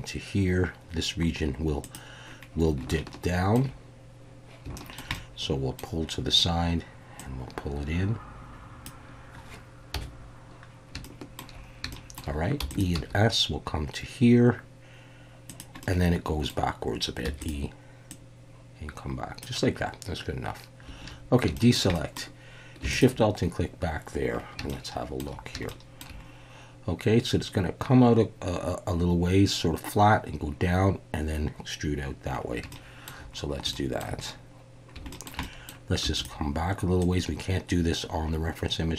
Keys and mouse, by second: 1.8 click, 2.9 shift+middle click, 4.8 shift+middle click, 5.1 middle click, 7.2-8.8 drag, 9.9 KP_1, 11.0 shift+middle click, 11.9 shift+middle click, 12.6 e, 12.7 click, 12.9 s, 15.5 click, 15.8 middle click, 17.2 e, 17.4 click, 18.1-19.4 drag, 21.0 alt+a, 21.5 shift+middle click, 21.9 middle click, 22.9 alt+shift+click, 24.7 shift+middle click, 25.7 shift+middle click, 32.7 shift+middle click, 33.7 shift+middle click, 35.1 shift+middle click, 35.4 middle click, 36.0 e, 36.1-38.9 drag.